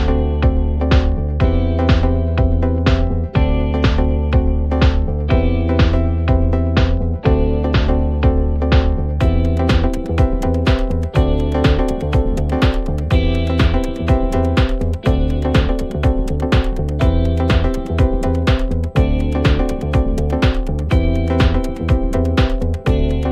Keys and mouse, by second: 5.0 middle click, 7.1 middle click, 10.8 middle click, 13.0 middle click, 14.7 middle click, 19.2 middle click, 19.9 middle click, 21.4 middle click, 21.7 middle click, 22.7 middle click.